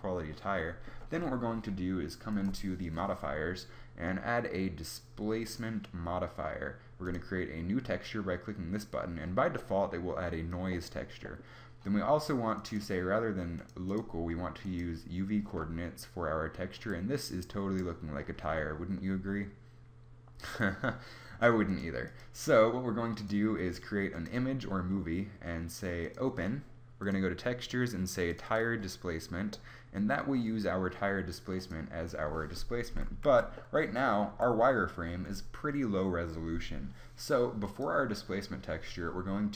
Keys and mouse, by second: 2.2 click, 6.9 click, 12.4 click, 15.5-18.8 middle drag, 21.6 click, 29.4 middle click, 31.5-33.1 middle drag, 33.1 z, 33.5 middle click, 34.2 z.